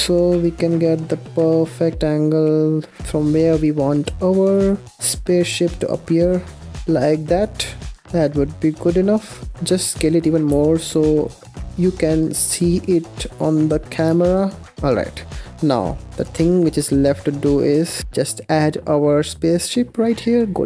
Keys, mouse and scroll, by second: 3.7 r, 8.0 s, 10.4 g, 11.6 r, 12.9 s, 13.7 g, 16.8 r, 19.9-20.6 scroll up 2.